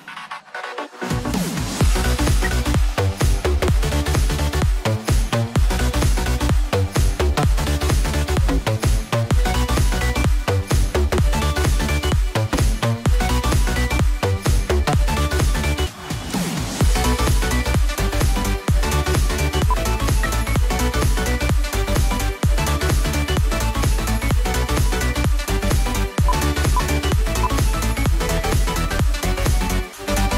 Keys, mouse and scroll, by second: 2.4 F2, 20.0 ctrl+z, 20.9 double click, 21.3 right click, 27.3 right click.